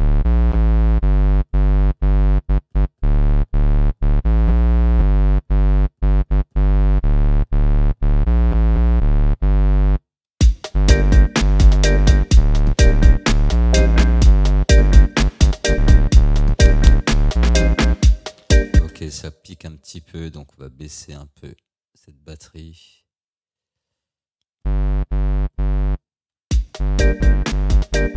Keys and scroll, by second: 10.4 space, 18.8 space, 26.5 space.